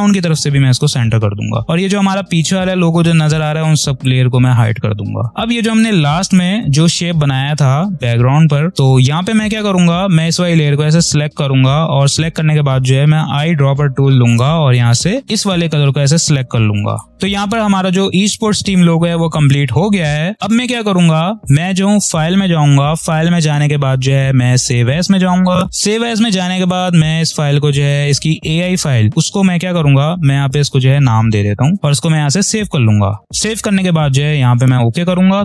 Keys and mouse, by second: 1.2 click, 3.9-5.7 drag, 8.7 click, 11.0 click, 13.3 i, 15.3 click, 16.3 v, 16.8 click, 22.0 click, 24.6 click, 26.7 click, 30.5 Caps_Lock, 30.9 c, 34.4 click.